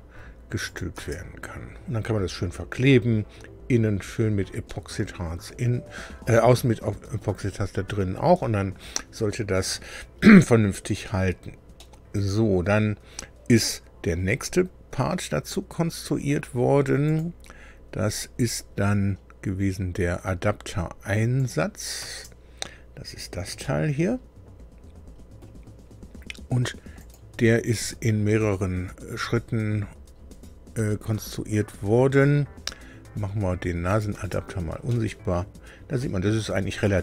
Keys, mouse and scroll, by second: 0.7 click, 0.9 space, 4.7-7.3 middle drag, 11.2-11.5 scroll down 2, 11.7-12.9 middle drag, 17.0 click, 21.3 click, 22.0 space, 23.0-23.3 scroll up 2, 23.6-25.6 middle drag, 26.9 click, 33.9 click, 34.1 space, 34.9 middle click, 34.9-37.0 drag.